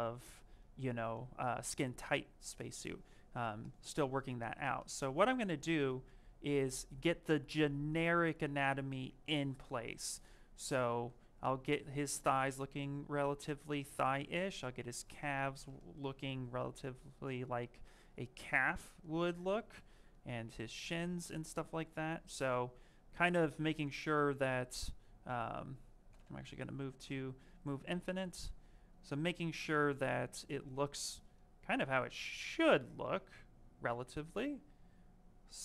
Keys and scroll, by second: 26.1 m, 33.9 s.